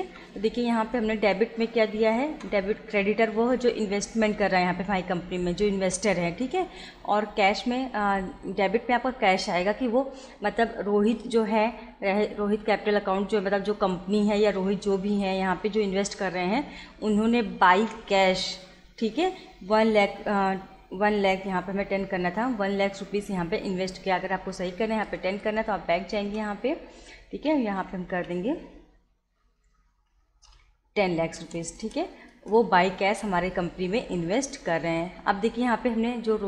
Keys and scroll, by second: 24.7 BackSpace, 27.8 1, 28.2 0, 31.4 Return.